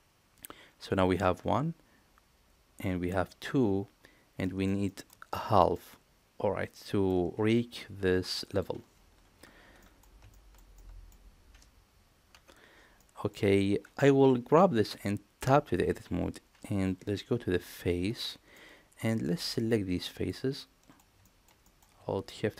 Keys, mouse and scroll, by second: 4.4 middle click, 4.8 shift+middle click, 5.3-5.7 middle drag, 9.8 middle click, 10.3 shift+middle drag, 10.7-11.1 middle drag, 12.9 middle click, 15.3 Tab, 17.6 3, 18.2 middle click, 19.8 click, 20.5 middle click, 21.2 shift+middle click, 21.6 middle click, 22.4 shift+click.